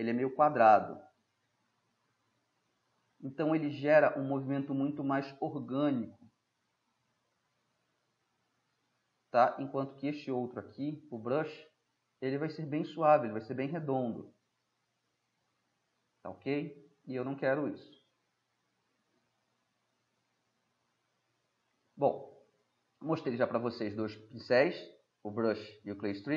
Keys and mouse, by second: 3.5-5.7 middle drag, 5.7-9.4 drag, 9.4 middle click, 12.1-12.8 middle drag, 12.8-14.3 drag, 14.3 middle drag, 14.6 click, 14.6-15.6 middle drag, 15.6 middle drag, 16.0 middle click, 16.6 middle click, 18.1-18.9 drag, 19.1-21.0 middle drag, 21.0-21.8 drag, 21.8 middle click, 22.0-22.3 drag, 22.3-23.0 middle drag.